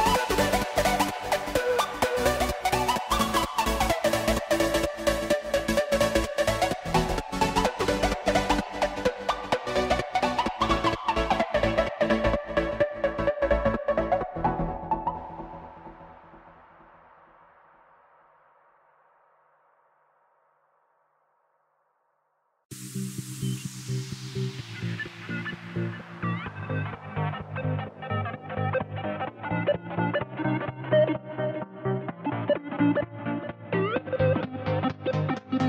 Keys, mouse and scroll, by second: 0.4 click, 1.5-3.3 drag, 3.7 middle click, 4.6 click, 6.0 middle click, 6.7 click, 8.8 KP_3, 9.7 ctrl+b, 16.4 ctrl+z, 16.8 scroll up 3, 17.0 middle click, 17.5-17.9 scroll up 1, 17.9 click, 18.7 click, 19.6 scroll down 2, 19.7 middle click, 20.4 click, 22.0-24.1 drag, 24.9 click, 25.9 click, 26.6 ctrl+b, 28.9 ctrl+z, 29.2 ctrl+z, 30.4 shift+click, 31.9 ctrl+z, 32.2 click, 32.5 Tab, 32.7 scroll down 3, 32.9 middle click, 33.3 ctrl+z, 33.5 ctrl+z, 33.7 ctrl+z, 33.9 ctrl+z, 34.1 ctrl+z, 34.2 ctrl+z, 34.4 ctrl+z, 34.6 ctrl+z.